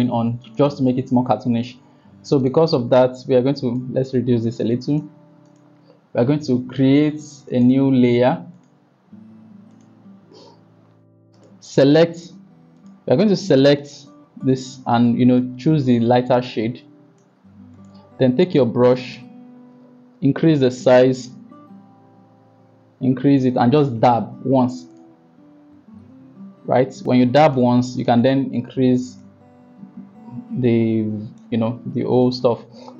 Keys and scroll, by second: 20.0 ], 21.2 ], 21.5 ], 21.6 ], 21.8 ].